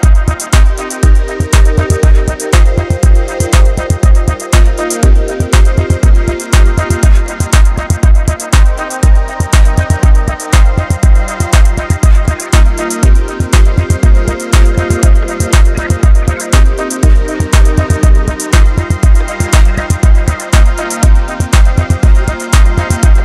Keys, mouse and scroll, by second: 12.4 click, 13.0 shift+click, 15.8-16.2 scroll down 1, 16.2 Tab, 16.6 scroll down 2, 16.8-17.5 middle drag, 17.5 alt+z, 17.7-19.0 middle drag, 19.0 scroll up 2, 19.3 KP_3, 20.0-21.0 shift+middle drag, 21.0 Tab, 21.4 middle click, 22.2 alt+z, 22.9-23.2 middle drag.